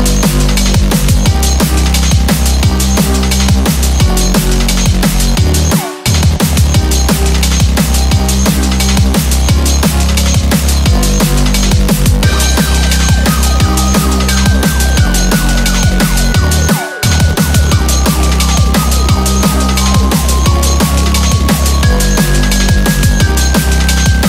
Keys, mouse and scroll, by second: 4.2-4.9 scroll down 2, 4.9 middle click, 5.4-6.5 scroll up 1, 6.5 click, 6.9 click, 7.3 click, 8.0 click, 8.7 click, 10.1 click, 10.3 click, 10.8 click, 11.9 click, 12.7 click, 13.6-14.7 scroll up 4, 14.7-15.7 scroll up 3, 15.7 click, 16.4 click, 17.3 click, 18.0 click, 18.7 scroll down 2, 18.9 middle click, 19.5 scroll up 3, 21.1 click, 21.8 KP_0, 24.0 scroll down 3.